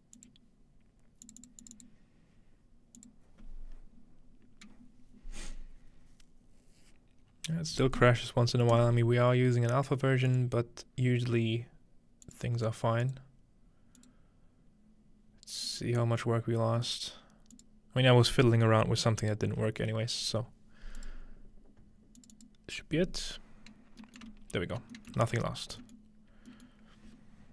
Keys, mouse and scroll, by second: 0.2 click, 1.3 click, 1.7 click, 3.0 click, 8.7 click, 10.3 click, 12.3 click, 13.0 click, 14.0 click, 15.7-19.6 drag, 21.0-23.2 drag, 23.8-24.2 scroll down 2, 24.0-25.8 ctrl+middle drag, 26.0-26.6 ctrl+middle drag, 26.7-27.5 ctrl+middle drag.